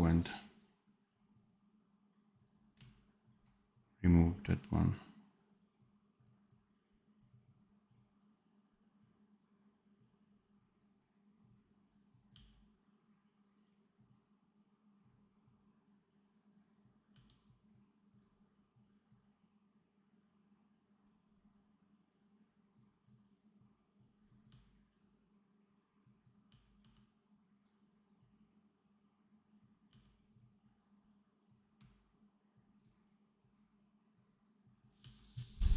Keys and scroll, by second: 12.2 d, 17.0 d, 24.4 d, 26.4 d, 29.8 d, 34.9 d.